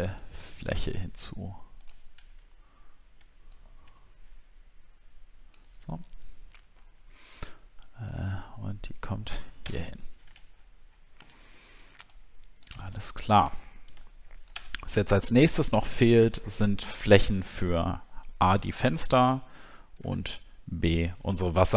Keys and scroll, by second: 0.8-1.9 alt+scroll up 6, 9.6 ctrl+BackSpace, 10.1 ctrl+d, 10.5 alt+scroll down 1, 11.2 alt+scroll down 1, 13.0 alt+scroll down 6, 20.2 alt+scroll down 1.